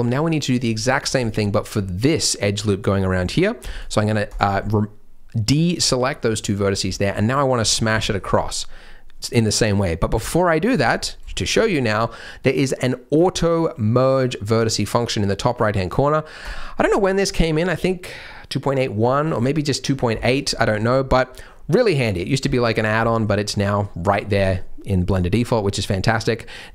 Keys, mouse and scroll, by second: 0.1-0.6 scroll down 2, 0.8 scroll down 1, 1.1 alt+click, 1.8 middle click, 3.1-3.6 scroll up 3, 3.7 shift+click, 4.2 shift+click, 4.6 middle click, 6.3 middle click, 6.6-6.9 scroll down 2, 6.9 middle click, 7.9 shift+middle click, 10.7-11.2 scroll up 4, 11.3 shift+middle click, 11.5-11.9 shift+scroll down 3, 13.3-14.1 scroll down 2, 16.4 click, 20.6-21.0 scroll up 1, 21.0-21.3 scroll down 1, 21.3-21.8 scroll down 2, 21.8-22.3 scroll down 3, 21.9 middle click, 22.7 scroll up 2, 23.0 shift+middle click, 25.4-25.8 scroll up 1, 25.9 scroll down 1.